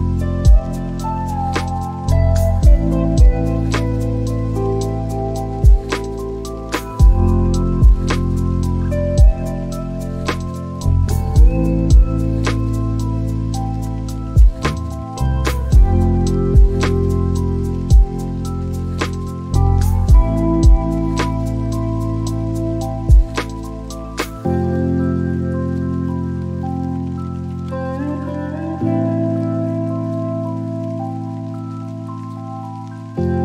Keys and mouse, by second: 0.8-3.3 drag, 6.3 click, 10.6 click, 11.6 click, 13.0 click, 13.8-15.2 drag, 16.1 click, 16.7 click, 21.6 middle click, 26.3 click, 29.7 click, 30.2 shift+a.